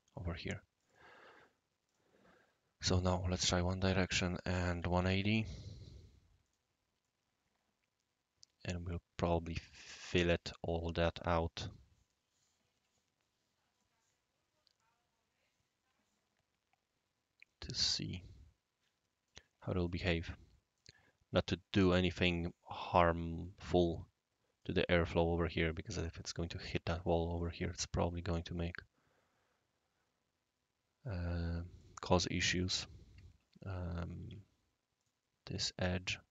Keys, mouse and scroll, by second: 0.7 click, 1.8 click, 2.9 click, 3.5 click, 4.1 click, 4.7-5.1 typing, 6.4 click, 7.0-8.7 right drag, 11.5-12.4 right drag, 13.8-19.3 right drag, 19.8-20.8 right drag, 22.9 click, 23.8-24.6 right drag, 25.7-26.0 right drag, 26.8 right drag, 27.4 click, 31.8 click, 32.5 click, 34.2 ctrl+z, 35.0 click, 35.9-36.3 right drag.